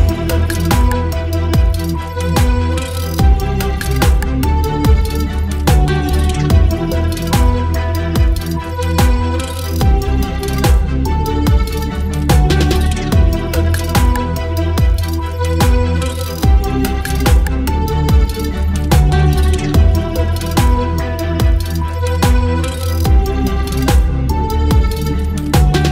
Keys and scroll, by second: 0.0 Delete, 8.5 Delete, 11.7 space, 12.6 v, 15.1 ctrl+e, 20.9 ctrl+t, 25.5 Return.